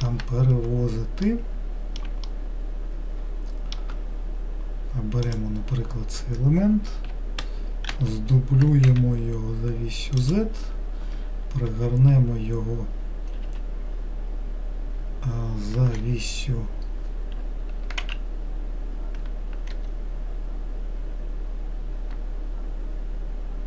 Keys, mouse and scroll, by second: 0.9-1.5 scroll up 1, 1.5-5.5 middle drag, 5.5 click, 8.2 shift+d, 12.0 r.